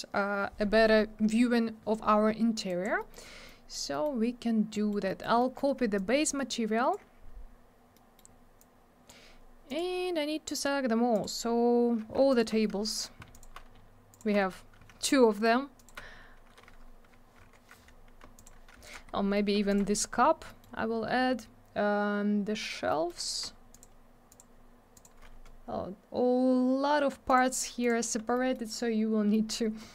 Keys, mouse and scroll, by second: 2.7 click, 2.8 click, 3.0 middle click, 3.1 middle click, 3.2 scroll down 1, 3.4 middle click, 3.9 middle click, 4.0 middle click, 4.7 middle click, 4.9 middle click, 5.1 middle click, 5.2 middle click, 5.4 middle click, 5.5 double middle click, 5.9 shift+click, 7.9 middle click, 8.3 scroll up 1, 8.6 click, 9.7 click, 9.8 click, 11.1 click, 11.2 click, 12.3 ctrl+click, 12.4 ctrl+click, 13.3 ctrl+click, 13.4 ctrl+click, 14.1 ctrl+click, 14.2 ctrl+click, 15.8 ctrl+click, 16.0 scroll up 1, 17.7 scroll up 1, 18.3 ctrl+click, 18.8 alt+click, 18.9 alt+double click, 19.1 scroll down 1, 19.7 ctrl+click, 20.2 scroll down 1, 20.5 middle click, 20.6 middle click, 20.8 scroll up 1, 22.9 middle click, 23.1 middle click, 23.7 ctrl+click, 23.8 ctrl+click, 24.3 ctrl+click, 24.4 ctrl+click, 24.9 ctrl+click, 26.7 scroll up 1, 27.3 ctrl+click, 27.8 ctrl+click, 28.3 middle click, 28.5 middle click, 28.9 scroll up 1, 29.3 middle click, 29.5 middle click.